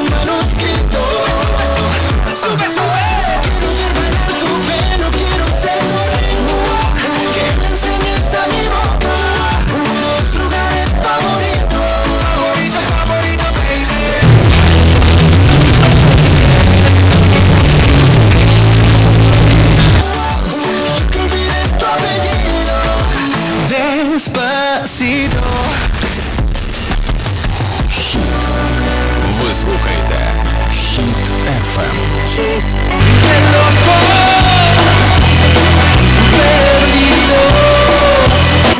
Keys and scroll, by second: 20.0 Page_Down.